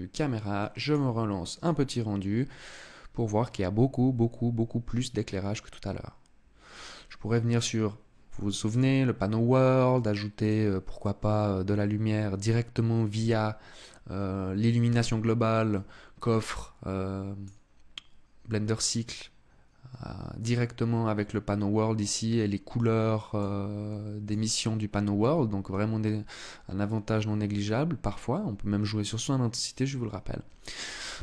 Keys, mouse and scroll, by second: 0.4 click, 7.1 click, 8.3 click, 10.0 click.